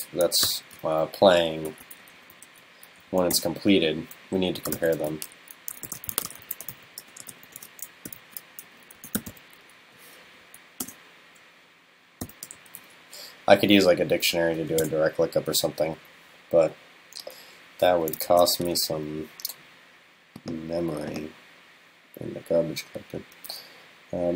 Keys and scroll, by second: 18.3 super+s.